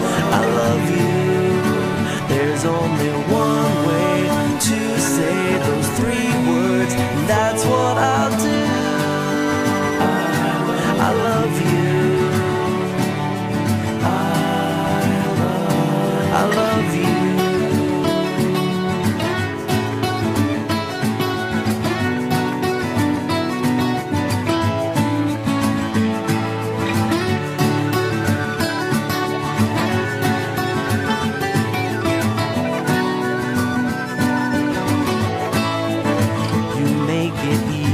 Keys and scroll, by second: 0.7 ctrl+z, 4.2 ctrl+z, 6.2 ctrl+z, 7.6 ctrl+z, 8.7 ctrl+z, 9.1 ctrl+z, 9.7 ctrl+z, 10.3 ctrl+z, 11.3 ctrl+z, 12.4 ctrl+z, 13.8 ctrl+z, 15.2 ctrl+z, 16.4 ctrl+z, 17.3 ctrl+z, 27.8 ctrl+z, 28.7 ctrl+z, 29.9 ctrl+z, 30.8 ctrl+z, 35.9 ctrl+z.